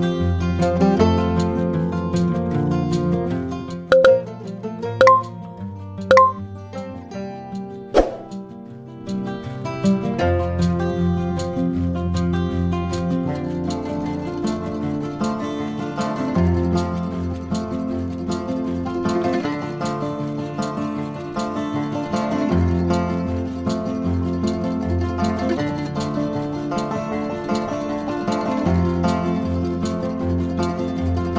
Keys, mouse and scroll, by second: 0.7 shift+c, 2.8 Tab, 4.0 ctrl+middle click, 6.1 a, 6.7 right click, 10.8 click, 12.9 click, 13.7 click, 14.2 click, 14.8 click, 16.5 click, 17.0-17.7 drag, 18.1 drag, 18.9 click, 19.9 drag, 21.1 click, 21.9 Tab, 22.4 click, 23.1 ctrl+l, 23.6 p, 24.6 Tab, 25.3 click, 27.1 Tab, 27.6 click, 28.5 ctrl+l, 28.9 p, 30.1 Tab, 30.7 click.